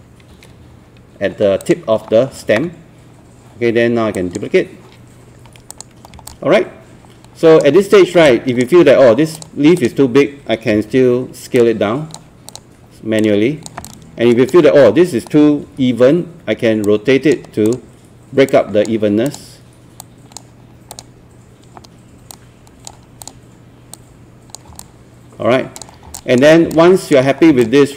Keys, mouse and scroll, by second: 0.3 9, 0.6 8, 1.6 click, 6.3 alt+click, 7.8-8.2 scroll up 1, 8.3 alt+click, 9.4 click, 11.6 click, 13.9 alt+click, 15.7 alt+e, 16.8-24.7 drag, 24.8 alt+click, 26.0 scroll up 1, 26.2 alt+click, 26.5 scroll down 1, 26.9 alt+click, 27.3 scroll up 1, 27.4 scroll down 1, 27.6 alt+click.